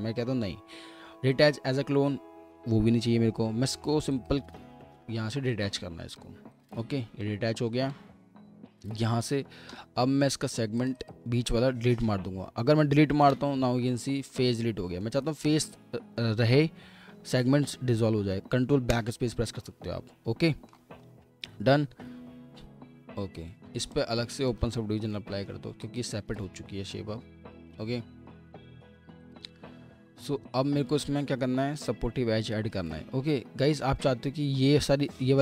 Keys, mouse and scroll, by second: 6.5 double click, 7.2 alt+middle click, 9.8 typing, 11.0 double click, 13.2 Delete, 14.3 middle click, 15.4 alt+middle click, 16.0-17.0 scroll up 1, 17.0 ctrl+z, 18.9 ctrl+BackSpace, 20.1 scroll down 1, 20.5 alt+middle click, 21.0-22.2 alt+scroll up 1, 22.2 typing, 23.4 typing, 25.7-26.5 typing, 32.5 alt+middle click, 33.2-33.7 alt+scroll up 2, 33.7 scroll down 1.